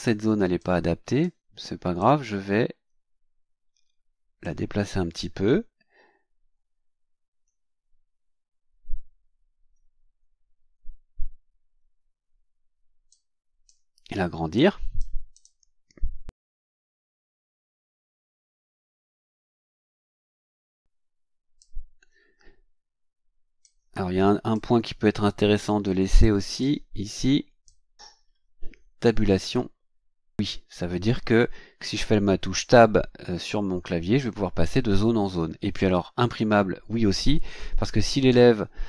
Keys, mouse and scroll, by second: 0.6 click, 2.0-4.6 drag, 6.1-6.4 ctrl+scroll down 2, 7.1 ctrl+scroll down 2, 8.1 shift+scroll up 2, 9.3-9.6 shift+scroll down 2, 10.3 shift+scroll down 2, 13.1 click, 14.5 click, 15.3 click, 16.3-18.6 drag, 20.2-21.7 drag, 23.6-24.7 drag, 26.2 click, 27.6 click.